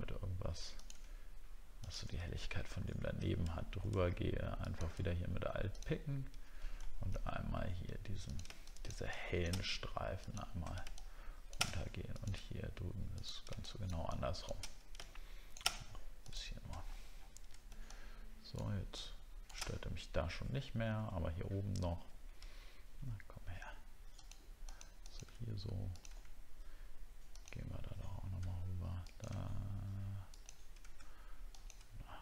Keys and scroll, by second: 16.8 alt+scroll down 1, 22.5-23.1 alt+scroll up 2.